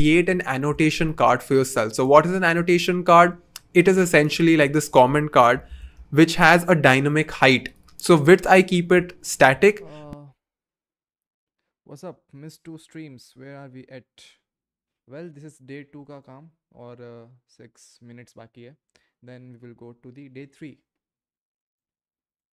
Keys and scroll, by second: 5.2-6.5 typing.